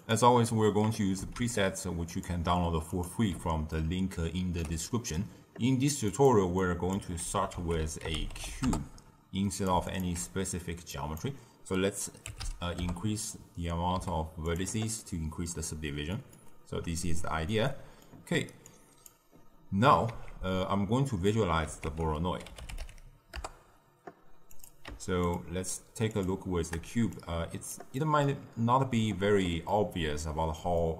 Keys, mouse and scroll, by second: 0.0 click, 2.2 shift+a, 3.0 click, 3.7-6.5 ctrl+middle drag, 6.5 click, 7.1 ctrl+x, 8.5 ctrl+a, 9.8-14.5 alt+shift+drag, 14.5 z, 15.0-20.2 ctrl+middle drag, 20.2 z, 23.3 ctrl+a, 25.2 ctrl+shift+click, 26.0-29.7 ctrl+shift+drag, 29.7-30.9 middle drag.